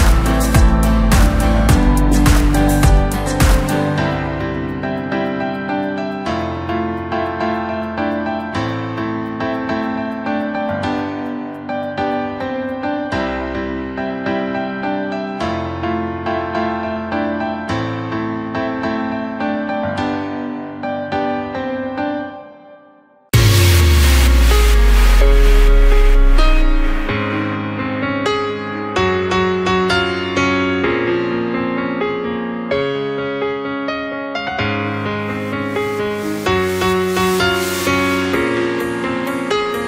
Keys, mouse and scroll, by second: 0.0 middle click, 0.8-1.6 scroll up 1, 1.6 KP_1, 2.7 click, 4.3-5.5 middle drag, 5.5 shift+click, 8.6 shift+click, 9.2 KP_1, 10.1 g, 13.3 Tab, 13.6 scroll down 3, 13.9-15.9 middle drag, 15.9 KP_1, 16.6 ctrl+KP_2, 16.7 ctrl+KP_2, 18.1 click, 18.5-20.3 scroll down 4, 20.3-23.4 drag, 23.4 scroll up 3, 23.7 scroll down 3, 23.9-25.0 middle drag, 25.0 KP_7, 26.0 s, 29.3 KP_1, 30.2 s, 32.8 scroll up 1, 33.1-33.4 scroll down 1, 33.4-33.9 middle drag, 33.9-35.3 scroll up 2, 35.3-36.6 drag, 36.6-37.1 scroll down 2, 37.1 KP_1, 39.1 scroll up 1, 39.4-39.7 scroll down 2, 39.7-39.8 middle drag.